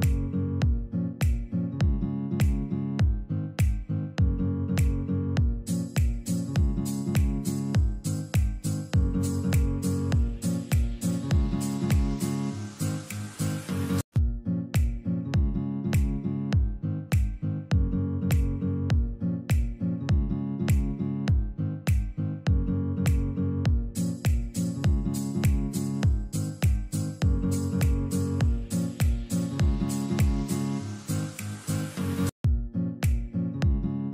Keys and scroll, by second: 3.4 1, 4.0 Return, 7.1 Escape, 17.0 shift+Page_Up, 26.4 F2, 29.8 KP_Add.